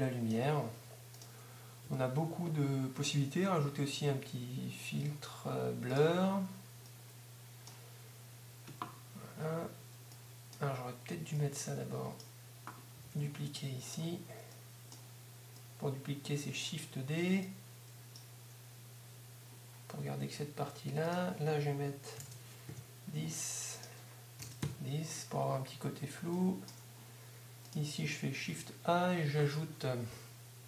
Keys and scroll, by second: 2.0 shift+a, 13.0 shift+d, 28.4 shift+a.